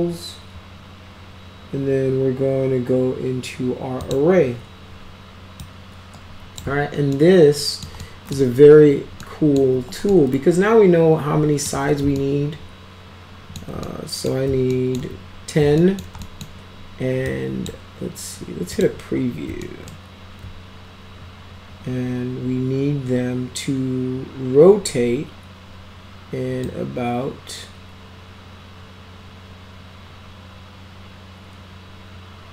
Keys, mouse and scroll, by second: 4.0 click, 5.6-6.6 drag, 7.1-7.9 alt+middle drag, 8.0 alt+middle click, 9.2 alt+middle click, 9.7 alt+q, 10.1-11.7 alt+middle drag, 12.2-13.6 alt+middle drag, 13.9-14.3 middle drag, 14.7 alt+middle drag, 15.8 alt+middle drag, 16.2 middle drag, 17.3-17.7 drag, 18.7 click, 19.6 alt+middle click, 26.7-32.5 drag.